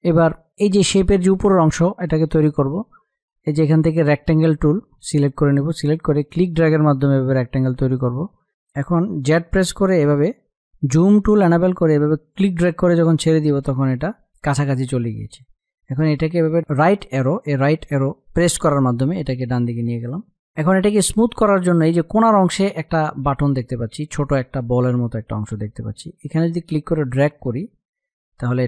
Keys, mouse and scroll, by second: 6.1-8.1 drag, 9.5-13.1 drag, 13.1 space, 13.2 click, 13.5 space, 13.9 click, 16.2 Left, 16.7 Right, 17.0 Left, 26.3-28.6 drag.